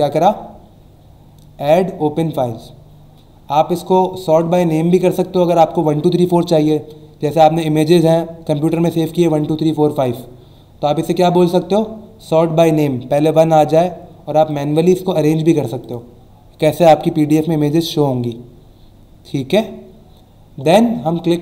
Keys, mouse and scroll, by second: 4.4 click, 14.5 click, 15.8 click.